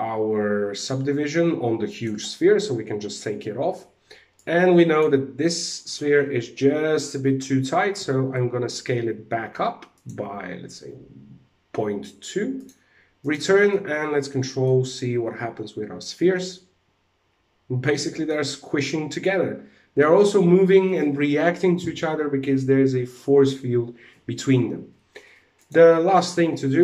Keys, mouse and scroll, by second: 1.4 click, 2.5 scroll down 1, 4.0 click, 7.5 s, 12.1 click, 12.7 click, 13.2 middle click, 14.5 middle click, 19.8 alt+a, 25.1 click, 25.6 click, 26.2 middle click.